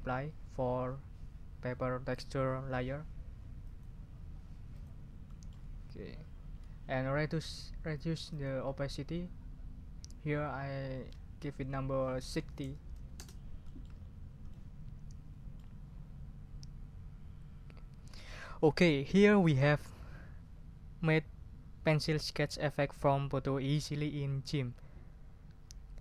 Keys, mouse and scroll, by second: 3.6 click, 4.7 click, 5.3 click, 8.3 click, 10.9 ctrl+a, 12.3 6, 12.6 0, 13.1 Return, 13.6 ctrl+middle click, 14.0 ctrl+scroll up 2, 14.5-15.7 ctrl+drag.